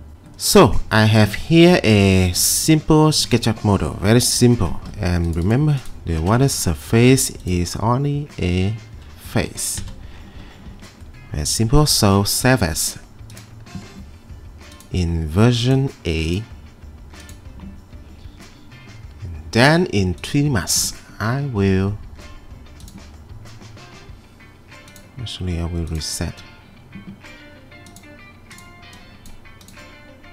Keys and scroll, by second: 7.1 m, 9.3 Escape, 10.7 Escape.